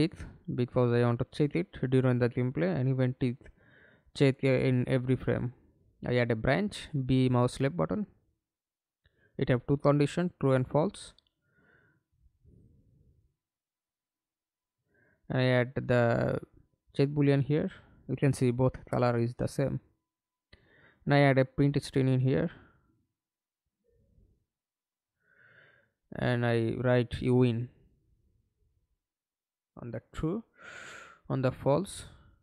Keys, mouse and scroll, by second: 2.2 right click, 3.2-4.6 typing, 5.3 Return, 12.7 double click, 17.4 right click, 18.9-20.6 typing, 23.7-25.7 typing, 26.7 right click, 30.2-31.7 typing.